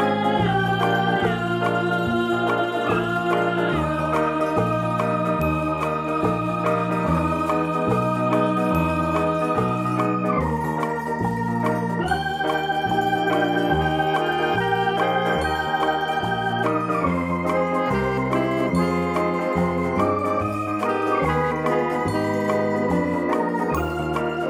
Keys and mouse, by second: 0.9 ctrl+click, 1.5 ctrl+click, 2.0 ctrl+click, 3.4 ctrl+click, 4.5 v, 4.7 click, 5.7 click, 7.5 click, 8.5 click, 10.0 click, 10.4 space, 10.6 click, 10.9 space, 12.3 click, 12.8 click, 13.5 click, 15.6 click, 15.9 ctrl+z, 16.1 click, 16.4 space, 16.6 click, 17.2 click, 18.0 click, 18.8 space, 19.0 click, 19.9 ctrl+click, 20.2 ctrl+z, 20.4 space, 20.4 click, 20.9 p, 21.2 click, 21.8 click, 22.3 click, 22.8 click, 23.0 z, 23.5 click, 24.0 click.